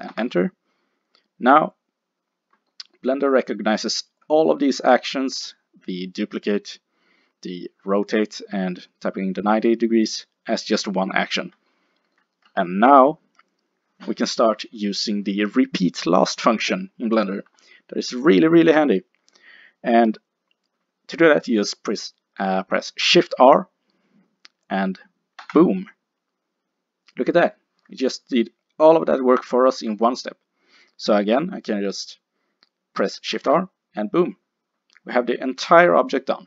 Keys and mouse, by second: 1.8-4.6 middle drag, 11.7-15.3 middle drag, 25.5 shift+r, 30.0-33.4 middle drag, 33.4 shift+r.